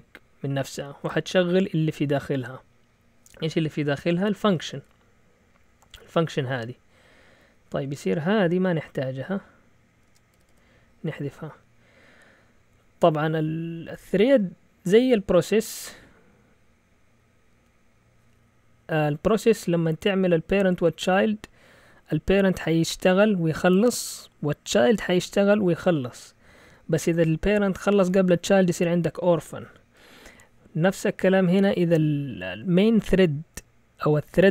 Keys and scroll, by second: 4.2 Left, 4.4 Left, 4.5 Left, 4.7 Left, 4.8 Left, 5.5 typing, 7.4-7.8 typing, 9.8-10.5 typing.